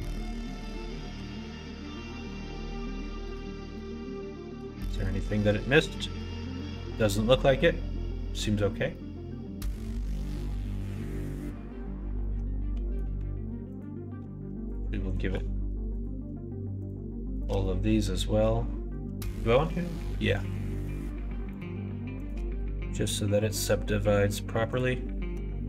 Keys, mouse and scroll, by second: 1.0 /, 3.1 click, 3.6 middle click, 4.7 middle click, 5.8 middle click, 6.5 middle click, 7.2-8.2 middle drag, 8.8 middle click, 10.0-11.2 middle drag, 12.1 middle click, 13.7 click, 15.0 shift+click, 15.8 click, 16.7 shift+click, 17.3 shift+click, 17.5 middle click, 20.7 shift+click, 21.5 shift+click, 22.1 shift+click, 22.4 q, 25.2 Tab.